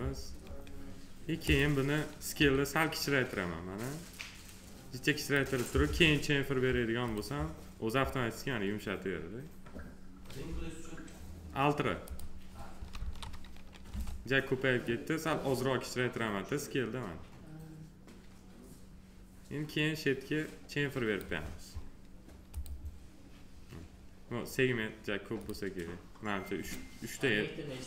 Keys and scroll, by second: 2.3 r, 5.8 w, 12.9 ctrl+z, 13.8 r.